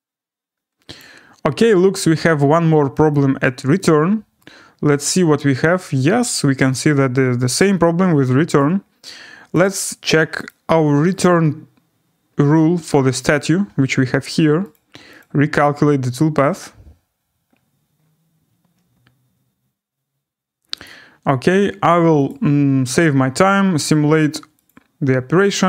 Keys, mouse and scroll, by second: 1.0 click, 3.1 click, 4.4 right click, 4.6 scroll, 6.3 right click, 8.6 right click, 9.6 click, 10.4 click, 11.2 click, 13.3 click, 15.2 click, 20.8 click, 22.3 click, 24.6 click.